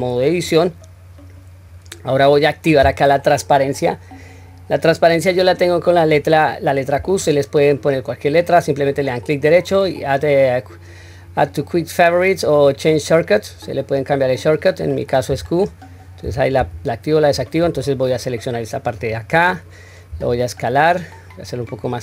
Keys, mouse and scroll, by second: 0.3 Tab, 8.9-14.4 right drag, 18.1 click, 20.1 s.